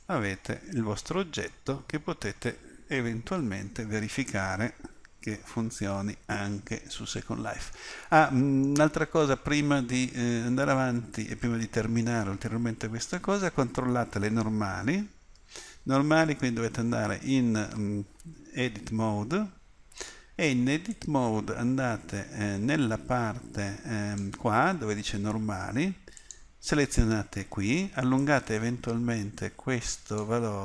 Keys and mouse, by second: 3.5 middle click, 7.8 middle click, 11.3-15.4 middle drag, 15.4 Tab, 20.9-29.3 middle drag.